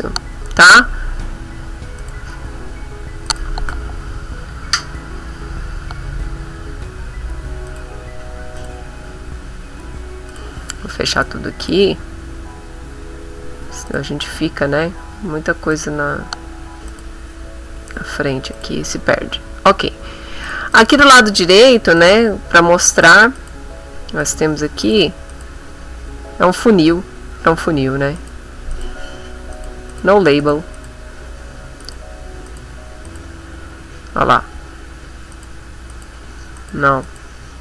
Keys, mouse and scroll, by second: 0.0-1.3 scroll up 4, 2.0 click, 3.3 click, 7.7 click, 8.6 click, 9.3-9.6 scroll up 1, 10.3 click, 11.6 click, 13.9 click, 15.7 click, 16.9 click, 18.5 click, 20.5 click, 20.7 click, 22.0 click, 22.9 click, 23.4 click, 24.2 click, 24.9 click, 25.3 click, 28.2 click, 28.7 click, 29.5 click, 29.9 click, 30.4 click, 30.8 click, 31.8 click, 32.5 click, 33.1 click, 35.3 click, 35.9 click, 36.6 click, 37.1 click.